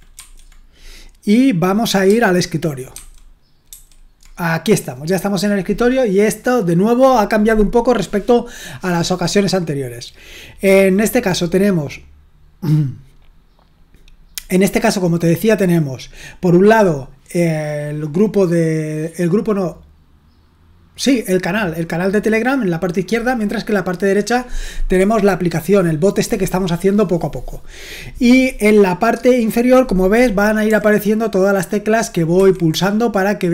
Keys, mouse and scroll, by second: 0.1 ctrl+1, 2.9 super+2, 3.7 super+1, 30.6 j, 32.3 Escape, 32.7 u.